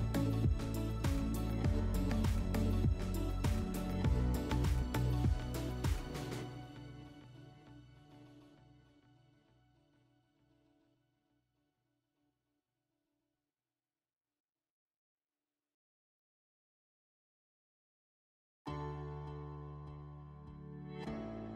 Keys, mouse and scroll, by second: 2.9-4.1 drag, 8.5 click, 9.9 click, 11.8 click, 14.6 click, 14.8 click, 15.7 7, 16.5 Return.